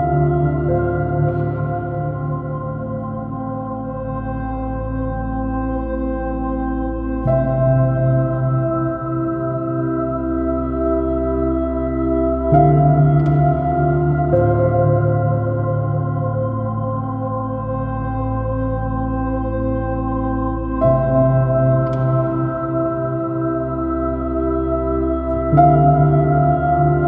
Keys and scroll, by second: 3.7 Return, 4.9 alt+b, 5.1 super+i, 5.8 x, 6.5 super+z, 7.2 super+z, 8.1 super+z, 8.7 BackSpace, 9.7 s, 15.0 space, 16.5 space, 17.3 space, 18.2 space, 19.1 space, 21.3 Up, 21.9 Down, 22.5 Down, 23.1 Up, 23.2 space.